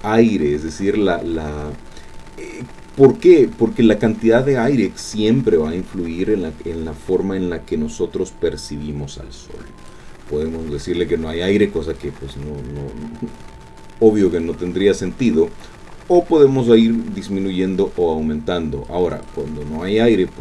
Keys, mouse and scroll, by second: 0.5-1.7 scroll down 2, 1.7-2.7 scroll down 2, 2.7-5.2 scroll up 2, 9.4 click, 12.0-15.5 drag, 18.8 click.